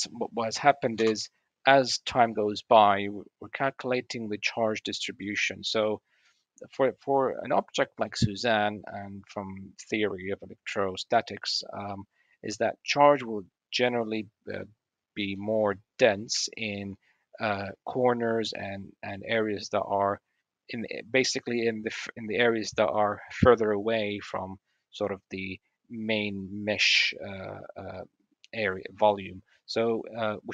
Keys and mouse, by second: 0.8-2.5 drag, 0.8 space, 3.4 click, 3.6 click, 4.0 click, 5.0 drag, 6.9 click, 7.1-7.9 middle drag, 7.9-8.4 drag, 11.6 click, 12.4-15.2 middle drag, 15.2-16.0 drag, 16.0-16.4 middle drag, 16.4-16.9 drag, 27.8-28.1 middle drag, 28.9-29.2 middle drag.